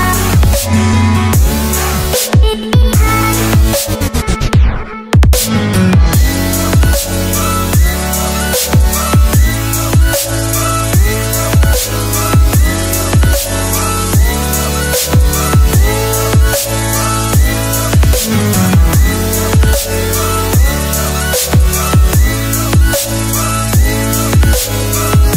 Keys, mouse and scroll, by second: 4.4 click, 9.8 click, 14.1 click.